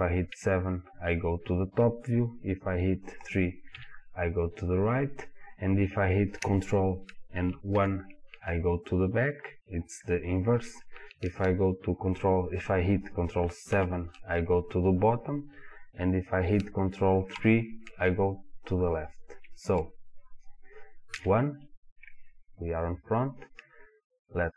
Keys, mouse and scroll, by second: 0.3 KP_7, 3.7 KP_3, 7.7 ctrl+KP_1, 13.7 ctrl+KP_7, 17.4 ctrl+KP_3, 21.2 KP_1.